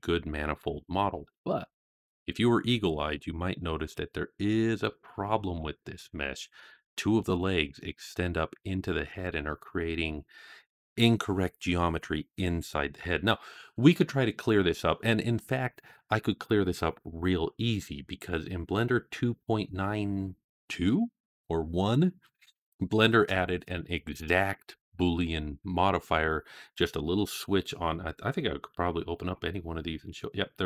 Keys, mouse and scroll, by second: 0.7-1.1 scroll down 2, 1.4-1.8 shift+middle drag, 2.8-3.8 middle drag, 4.2-4.7 scroll up 3, 4.9-5.4 shift+middle drag, 5.7-6.4 scroll up 2, 6.4-7.1 middle drag, 12.8-13.5 scroll down 4, 13.8-14.5 middle drag, 29.0 click.